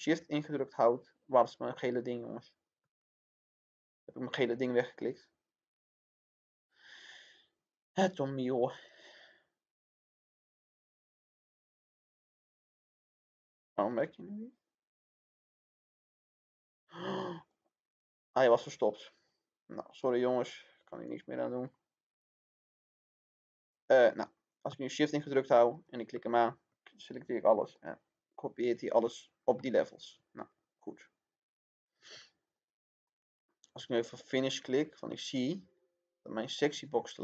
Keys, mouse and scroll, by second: 17.6-22.8 drag, 25.6 shift+click, 27.7 click, 29.5-31.8 shift+middle drag, 32.4 click, 33.0 middle click, 33.4-33.8 scroll up 1, 34.4 click.